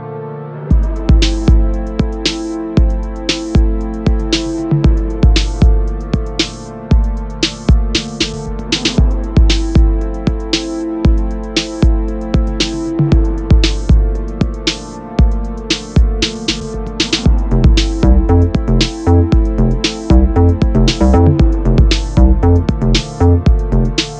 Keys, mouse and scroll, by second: 0.1 click, 1.1-8.1 middle drag, 1.3-1.8 scroll down 2, 1.8 r, 3.8 KP_Enter, 4.0 KP_0, 5.2 r, 7.2 KP_Enter, 7.5 scroll down 2, 7.6 g, 8.1 click, 8.3 scroll up 1, 8.8 click, 9.1-10.2 drag, 9.6 KP_0, 9.7 KP_Enter, 13.8 shift+d, 13.9 Return, 15.1 click, 15.4 r, 16.7 KP_Enter, 17.2 g, 19.0-20.8 drag, 21.4-22.8 drag, 23.8 click.